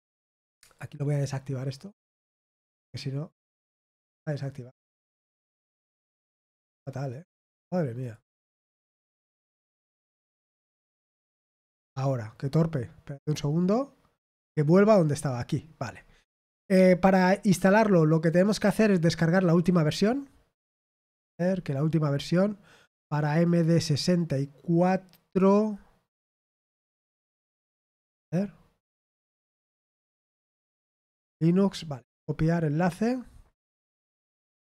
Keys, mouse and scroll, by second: 0.7 click, 3.7 click, 7.9 click, 11.0 click, 14.2 click, 15.4-17.1 scroll down 6, 17.5-18.1 scroll up 2, 19.3 click, 21.4-21.9 scroll down 1, 31.7 right click, 34.6 click.